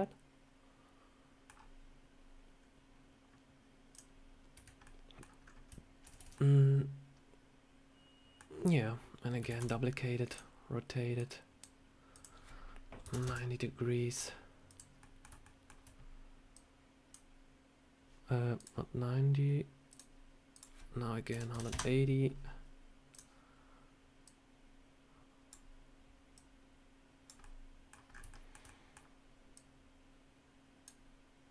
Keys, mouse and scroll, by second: 1.4 scroll down 1, 2.5 scroll up 1, 3.2 scroll up 1, 3.8 click, 4.7 middle click, 5.3 scroll up 2, 6.0 ctrl+z, 6.1 ctrl+z, 6.2 middle click, 9.4 shift+d, 10.2 click, 11.1 click, 12.0 click, 14.6 click, 14.9 middle click, 15.3 shift+middle click, 16.4 click, 18.4 click, 19.8 click, 20.4 click, 23.0 click, 24.1 click, 26.2 click, 27.3 middle click, 28.0 scroll up 4, 28.2 shift+middle click, 28.5 middle click, 29.4 click.